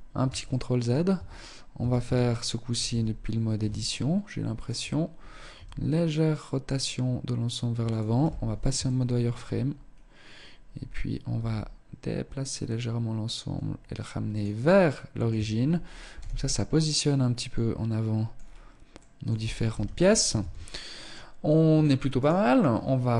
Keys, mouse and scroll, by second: 0.4 Tab, 0.8 a, 1.1 a, 1.9 KP_3, 3.0 shift+middle click, 4.6 r, 7.2 z, 7.8 shift+middle click, 8.6-9.7 scroll up 3, 9.7-10.4 scroll down 1, 10.4 scroll down 1, 10.4 g, 13.7 middle click, 14.4 Tab, 14.6-15.2 scroll down 4, 15.2 z, 15.6 middle click, 17.4-17.9 scroll down 2, 18.0 middle click, 18.8 KP_0, 19.8 ctrl+s, 21.3 right click, 23.0 KP_1.